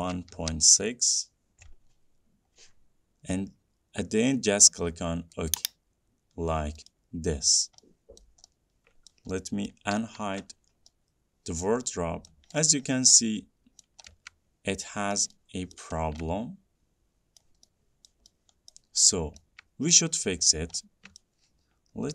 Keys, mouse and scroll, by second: 0.0-2.2 typing, 5.7 click, 6.6-7.1 scroll down 4, 7.1 middle click, 7.8 scroll down 2, 8.4 middle click, 8.8 scroll, 9.3 middle click, 10.0 middle click, 10.2 d, 10.6 middle click, 11.9 middle click, 11.9 scroll up 1, 12.5 middle click, 12.5 scroll down 1, 12.7 scroll up 4, 12.8 scroll down 5, 13.1-13.4 scroll up 5, 14.0 scroll down 2, 14.1 scroll up 1, 15.4 scroll up 1, 15.7-16.4 scroll, 16.1 middle click, 17.6-17.9 scroll, 17.9 middle click, 18.2 scroll, 18.9-19.6 scroll, 20.2-21.0 scroll, 21.4 scroll, 22.0 scroll.